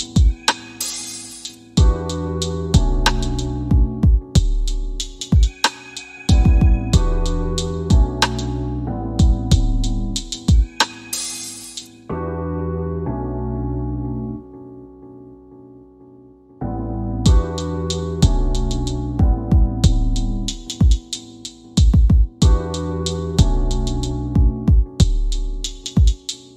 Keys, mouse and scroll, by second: 0.1-18.6 drag, 21.4-26.5 drag.